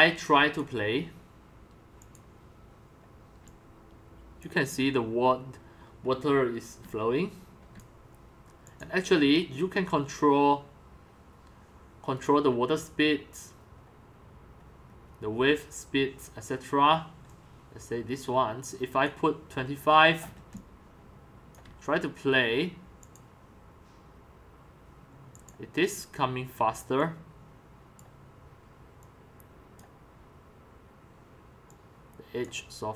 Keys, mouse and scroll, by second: 0.0-0.8 typing, 0.7-3.6 drag, 3.6-4.8 c, 6.8-8.0 typing, 8.2-12.0 drag, 14.5-15.0 scroll, 17.3-17.8 drag, 17.8-19.0 scroll up 4, 19.0 scroll up 1, 19.0 click, 20.0-20.7 scroll up 13, 20.7 c, 21.1 c, 21.6 c, 22.0 c, 23.1-32.9 drag.